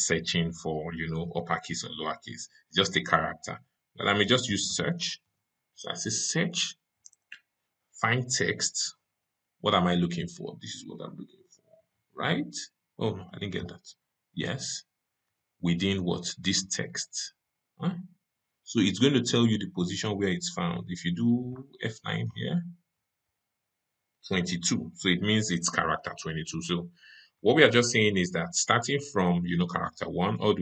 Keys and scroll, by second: 23.1 F9.